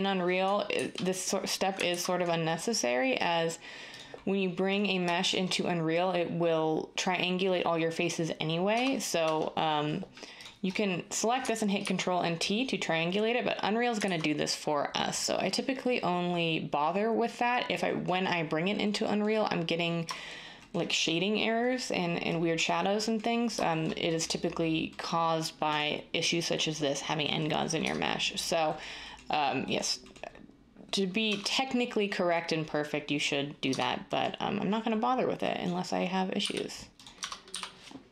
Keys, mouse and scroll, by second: 0.7 ctrl+t, 1.9 ctrl+x, 8.7 Tab, 9.2 Tab, 11.8 ctrl+t, 14.0 ctrl+z, 27.8 Tab, 31.2 Tab, 33.6 Tab, 36.4-38.1 typing.